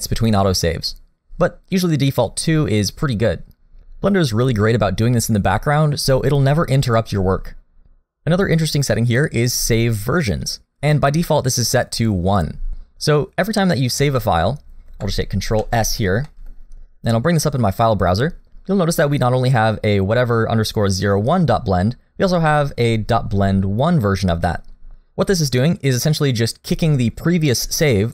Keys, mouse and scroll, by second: 15.6 ctrl+s, 16.3 middle click.